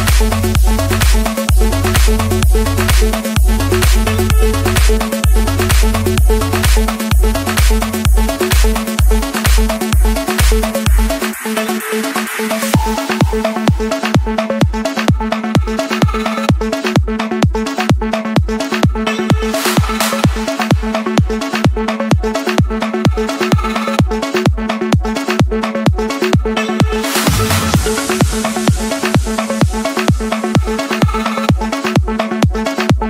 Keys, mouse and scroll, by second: 1.4-2.5 drag, 2.9-3.9 drag, 4.2-5.2 drag, 5.3-6.4 drag, 7.1 d, 7.6 Return, 9.3-10.0 typing, 10.5 Return, 12.2 Return, 12.9 Return, 13.4 Return, 14.4 scroll up 1, 14.9 Escape, 16.1 click, 19.2 click, 19.8 scroll, 20.1 Escape, 21.4-22.5 typing, 24.4 click, 25.4-27.1 drag, 28.2 d, 28.7 Return, 29.5 1, 30.0 Return, 30.8 1, 31.4 Return, 32.0 Return, 32.5 Return.